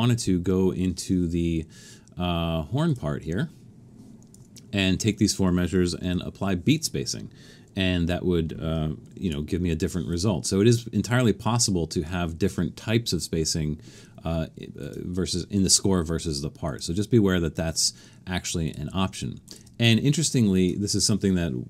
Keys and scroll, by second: 6.1 5, 9.2 super+u.